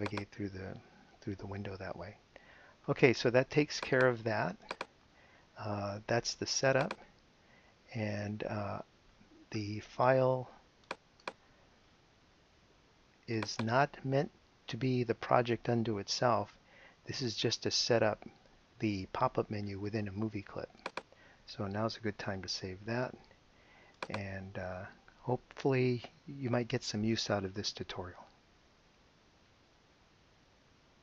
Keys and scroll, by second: 22.8 super+s.